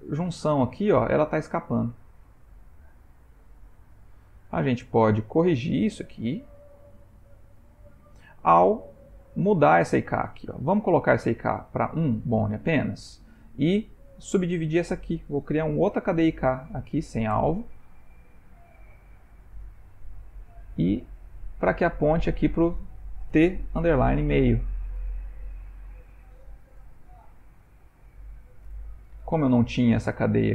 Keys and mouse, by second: 1.7 g, 9.3 click, 11.8 click, 14.6 click, 15.9 shift+i, 18.7 click, 20.6 click, 24.0 shift+-, 26.0 click, 28.2 Down, 28.4 Down.